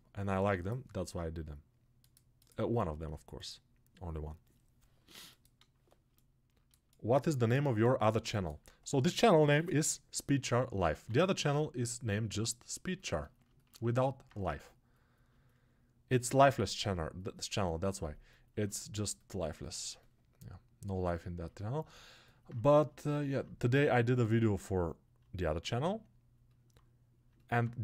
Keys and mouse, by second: 0.0-27.8 drag.